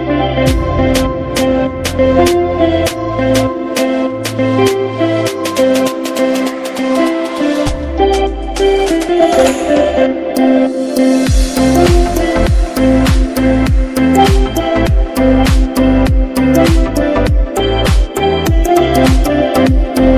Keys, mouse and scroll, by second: 5.6 click, 8.6-10.7 scroll up 1, 12.9 click, 19.9 click.